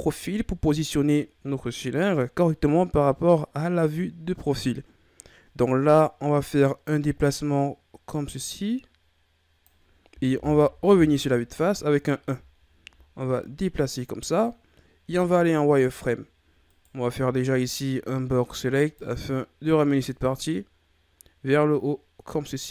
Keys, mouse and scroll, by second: 1.4-4.4 scroll down 1, 5.6-8.6 drag, 10.7 KP_1, 12.6-13.4 scroll up 3, 13.4-15.1 drag, 15.1 z, 16.7 right click, 17.2 b, 20.1-22.7 drag.